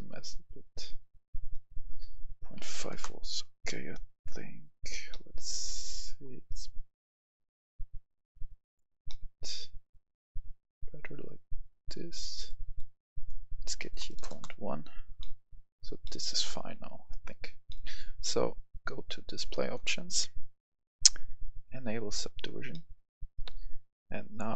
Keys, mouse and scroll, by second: 2.8 5, 2.9 Return, 3.6 middle click, 4.7-5.1 scroll down 2, 5.1-6.4 middle drag, 6.4 scroll up 1, 7.9 click, 9.0-11.1 middle drag, 11.5 click, 14.1 BackSpace, 14.2 1, 14.3 Return, 15.2 middle click, 15.5-16.0 scroll down 1, 16.0-17.1 middle drag, 17.2 scroll up 1, 17.7 middle click, 18.0-18.4 scroll down 1, 19.0 click, 22.7 middle click, 23.5 scroll down 1, 24.4 click.